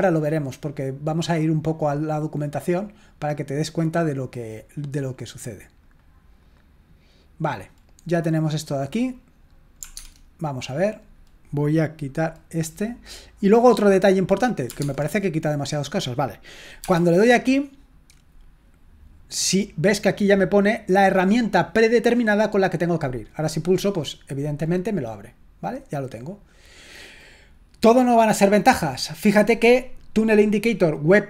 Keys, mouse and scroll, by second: 5.8-7.3 drag, 8.8 click, 10.1 alt+Tab, 13.3 click, 14.8 alt+Tab, 23.5 click, 25.6 click, 29.5 click.